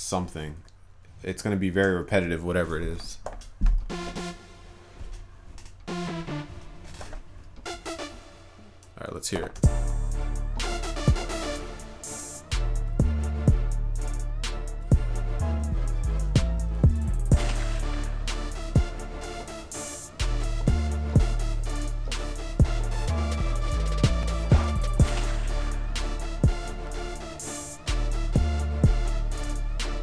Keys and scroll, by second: 2.1 ctrl+s.